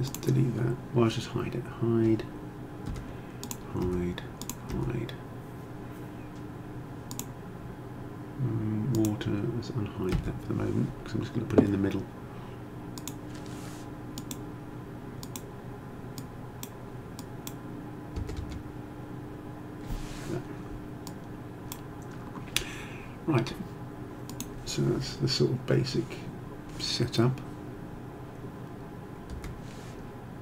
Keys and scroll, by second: 2.9 h, 10.2 h, 18.3 0, 18.5 Return, 29.5 h.